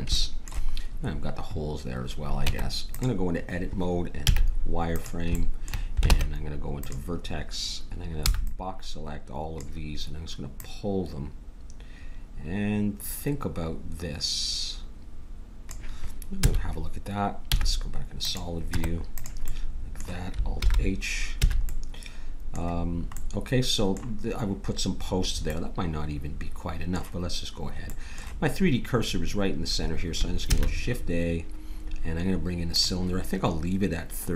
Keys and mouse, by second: 2.4 Tab, 4.3 z, 6.9 ctrl+Tab, 8.3 b, 10.5-12.4 drag, 16.4 a, 17.5 z, 18.7 Tab, 20.6 alt+h, 21.4 a, 26.1 middle click, 30.5 shift+a.